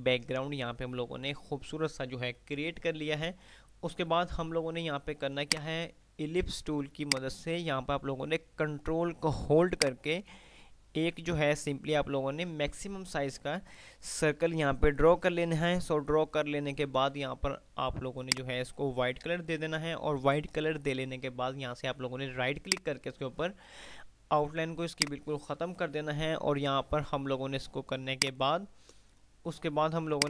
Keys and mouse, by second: 5.6 click, 10.0-12.8 ctrl+drag, 18.5 click, 22.8 right click, 25.1 click, 28.1 right click.